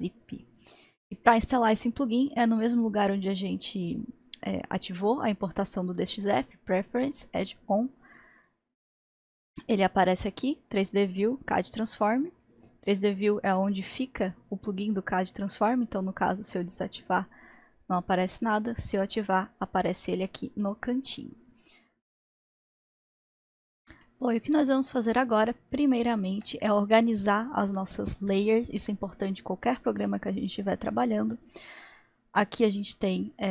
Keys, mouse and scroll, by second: 0.7-2.8 middle drag, 2.8-5.9 drag, 24.0-26.6 middle drag, 27.0-29.2 scroll up 2, 29.2-30.6 scroll up 1, 30.6 scroll up 1, 33.1-33.5 drag.